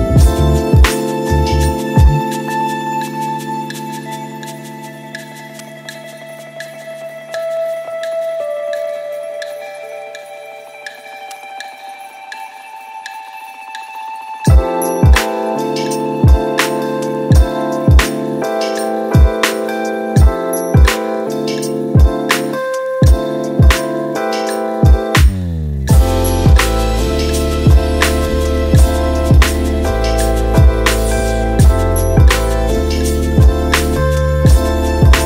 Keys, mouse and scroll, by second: 3.1 click, 3.4 click, 4.5 click, 5.3 click, 5.6 scroll down 1, 6.4-7.1 drag, 7.8 click, 8.9 click, 9.2 click, 9.5-11.0 middle drag, 11.0 shift+a, 12.9-13.4 middle drag, 13.4 s, 17.9 middle click, 18.8 KP_7, 20.0 z, 25.2-26.4 middle drag, 26.4 Tab, 27.3 click, 27.7-30.3 middle drag, 30.3 g, 33.6 click, 34.6 g.